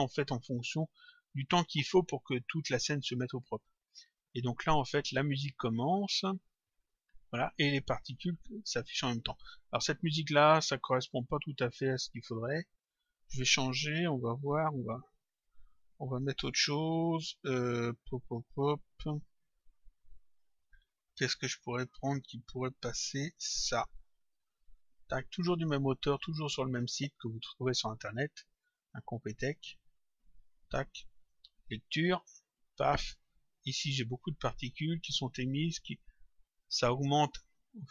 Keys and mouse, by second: 3.4 click, 10.9 click, 16.0 click, 18.1 click, 22.7 click, 27.2 click, 28.5 click, 37.8 click.